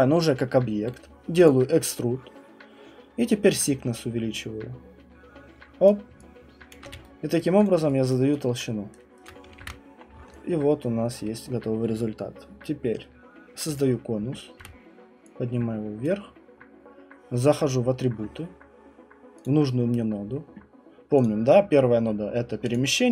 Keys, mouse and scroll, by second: 1.4 click, 5.8 click, 6.7 alt+click, 6.8 q, 7.4 right click, 7.6 click, 8.1 alt+click, 9.2 click, 9.6 ctrl+1, 10.0 scroll, 11.1 click, 13.8 click, 14.6 w, 16.0 click, 17.6 click, 19.4 click, 21.2 click.